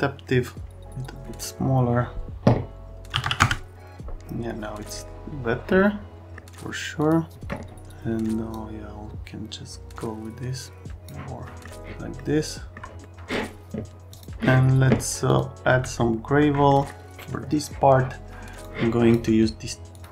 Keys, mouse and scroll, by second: 0.9 click, 3.1 KP_5, 3.2 KP_0, 3.4 KP_Enter.